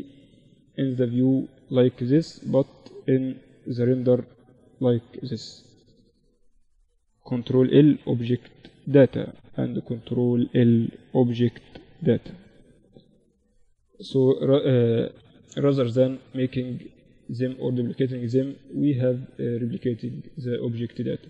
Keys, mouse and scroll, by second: 4.0 KP_Divide, 4.4 click, 5.0-6.7 drag, 6.7 ctrl+l, 6.7-7.8 right drag, 8.8-10.2 right drag, 10.4 ctrl+l, 12.8 middle click, 13.8 right click, 14.0-15.8 middle drag, 15.8-19.2 right drag, 19.0 click, 19.2-21.2 middle drag.